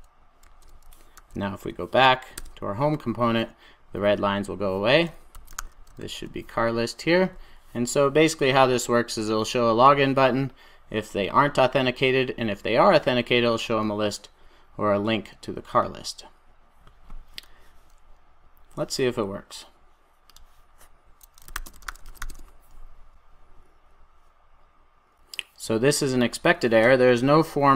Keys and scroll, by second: 0.3 super+s, 1.1 super+e, 5.9 super+s.